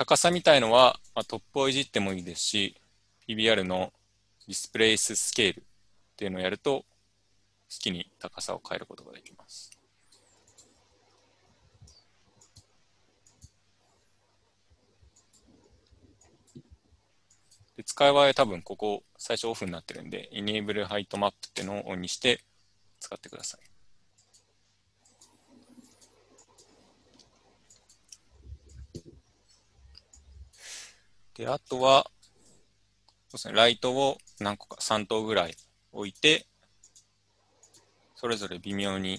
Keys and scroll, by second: 11.0 ctrl+z, 11.6 ctrl+z.